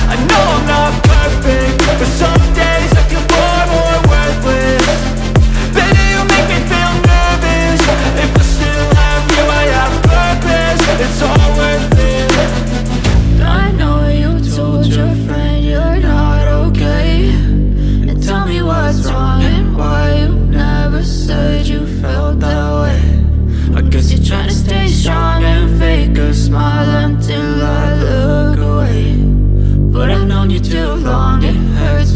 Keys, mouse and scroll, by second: 1.9 F9, 6.6 scroll down 1, 8.9 click, 10.3 click, 13.1 click, 14.2 F4, 15.9 F9, 17.0 click, 19.6-20.7 scroll up 1, 22.8 click, 24.8 click, 25.8 F4, 27.4 F9, 29.0 click, 32.0 scroll down 1.